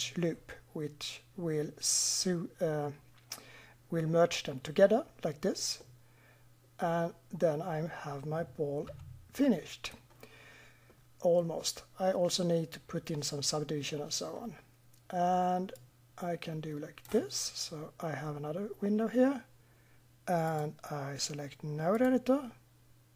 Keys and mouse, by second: 5.8-7.5 middle drag, 8.8 Tab, 15.7 middle drag, 16.0 click, 16.2 click, 16.4 middle click, 16.4 click, 16.6 middle click, 16.6 click, 16.8-18.0 middle drag, 20.4-21.2 drag, 21.2-22.0 middle drag, 22.0 click.